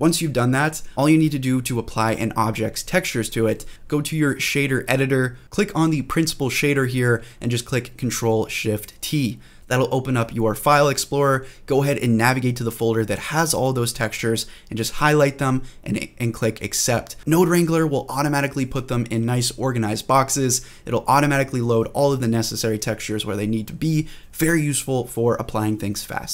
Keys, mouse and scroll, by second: 5.4 click, 5.4 scroll down 1, 6.1 middle click, 6.1-7.5 scroll down 2, 7.5 click, 7.5 scroll down 1, 7.9 ctrl+z, 8.1 scroll down 1, 9.1 ctrl+shift+t, 17.5 scroll down 3, 18.8 click, 19.2 middle click, 21.2-23.1 drag.